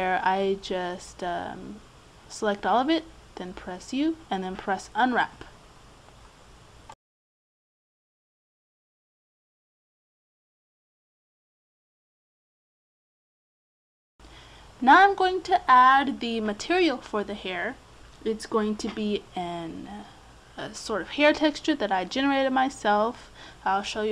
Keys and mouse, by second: 0.9 Tab, 1.5 a, 1.9 a, 3.7 u, 13.3-16.6 drag, 17.2-19.7 drag, 20.3-22.2 drag.